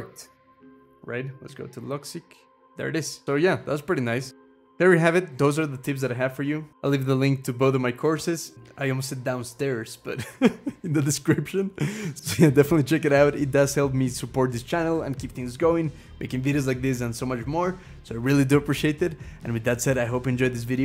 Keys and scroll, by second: 0.0-0.9 typing, 4.3 BackSpace.